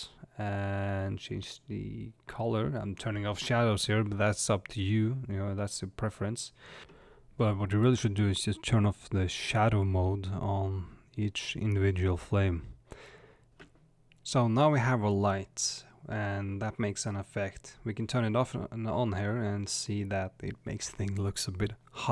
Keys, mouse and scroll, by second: 2.6 click, 7.5 click, 8.9 middle click, 9.2-10.8 middle drag, 10.9 middle click, 11.9 scroll down 1, 12.5 scroll up 1, 18.5 click, 19.1 click, 19.9 click, 21.5 click.